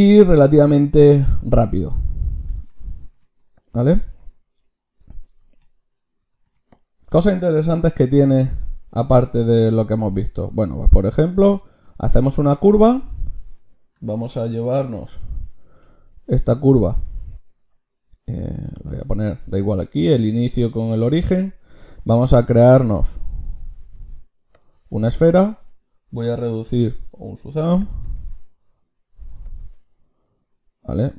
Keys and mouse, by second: 3.6-6.4 drag, 5.8 a, 6.2 a, 6.4 x, 6.8-7.8 drag, 7.8 shift+c, 8.5 shift+a, 14.0 Tab, 14.5 g, 17.1 click, 18.8 Tab, 21.6 shift+a, 27.6 x, 28.2 shift+a.